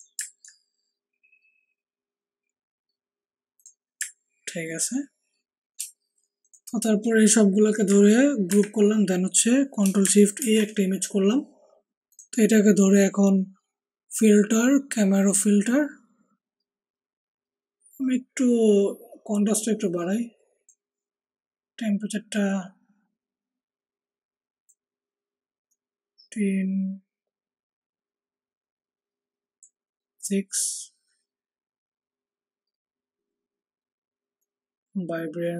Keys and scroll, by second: 8.4 ctrl+g, 10.3 ctrl+alt+shift+e.